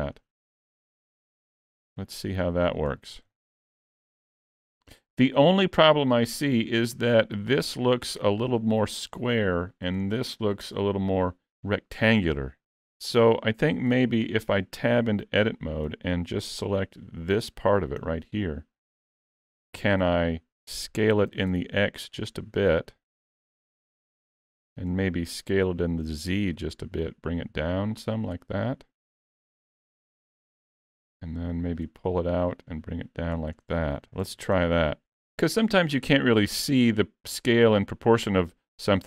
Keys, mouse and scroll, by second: 0.3 middle click, 0.8-1.2 scroll down 1, 1.9 scroll down 7, 2.0 middle click, 3.0-3.4 scroll up 4, 3.4 shift+middle click, 3.8 middle click, 5.8-6.5 scroll up 1, 6.5 scroll up 3, 6.8 shift+middle click, 7.6 click, 8.4 scroll up 2, 8.7 shift+middle click, 9.8 scroll up 2, 10.1 shift+middle click, 13.2 Tab, 14.0 alt+a, 15.0 middle click, 17.6 l, 18.1 middle click, 21.3 s, 26.4 s, 28.6 middle click, 31.2 click, 32.6 click, 33.6 scroll down 1, 34.2 scroll down 1, 34.3 alt+a, 34.6 Tab, 35.0 alt+a, 36.9 scroll down 6, 37.4 middle click, 38.3 scroll down 2.